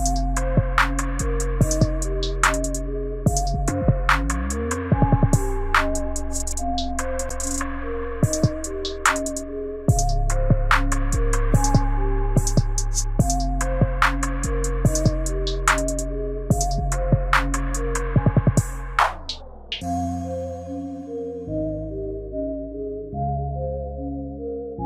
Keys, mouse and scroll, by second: 2.0 click, 4.2 click, 5.2 click, 5.9 click, 8.6 ctrl+z, 9.5 click, 10.1 click, 12.1 right click, 15.6 click, 16.5 click, 18.0 click, 23.4 click, 23.8 click.